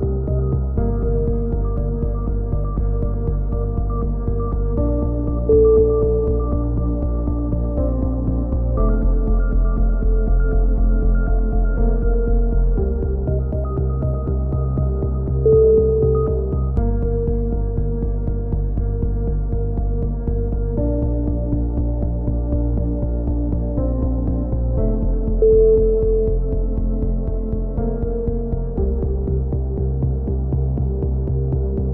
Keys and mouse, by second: 1.7 KP_3, 1.8 z, 2.8 a, 3.0 z, 3.8 z, 5.1-6.2 middle drag, 6.2 KP_1, 7.0 z, 7.5 middle click, 8.8 z, 9.2 z, 12.3 z, 12.4 z, 13.9 z, 14.3 z, 17.3 z, 17.5 z, 17.8 a, 18.0 z, 18.2 middle click, 19.2 KP_7, 19.4 z, 20.1 click, 21.2 click, 23.1 a, 27.1 k, 31.4 z, 31.7 z, 31.8 a.